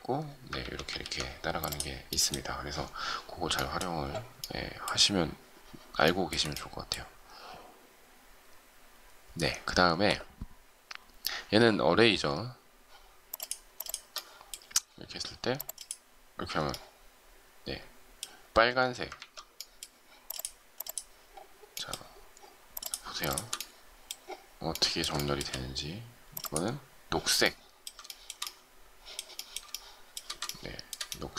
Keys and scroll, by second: 0.5 ctrl+z, 19.1 ctrl+z.